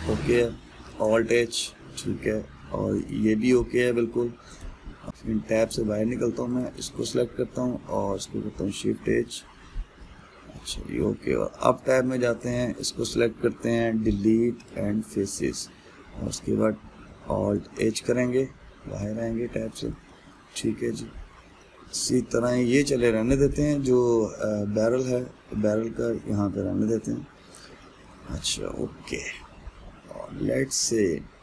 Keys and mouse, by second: 1.5 alt+h, 2.2-3.7 middle drag, 3.7 click, 5.1 alt+h, 5.3 middle click, 5.9 Tab, 6.4-7.2 middle drag, 7.2 click, 9.2 shift+h, 9.7-12.2 middle drag, 12.2 Tab, 13.0 click, 15.3 Delete, 17.0 Tab, 18.2 alt+h, 18.8-31.4 middle drag.